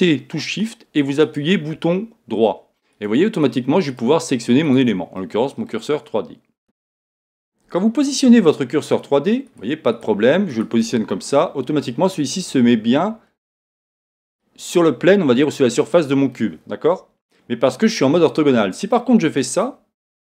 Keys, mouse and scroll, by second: 3.9 shift+right click, 4.1 middle click, 4.6 shift+right click, 5.1-6.6 middle drag, 6.6 click, 8.9 shift+right click, 10.0-11.1 shift+right drag, 11.1-19.5 middle drag, 17.0 KP_1, 19.5 click.